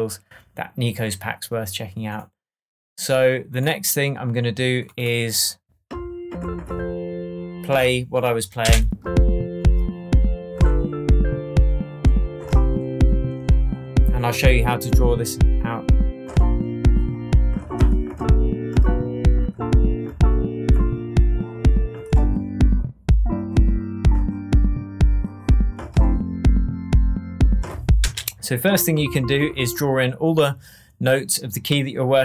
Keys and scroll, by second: 8.6 space, 28.0 space.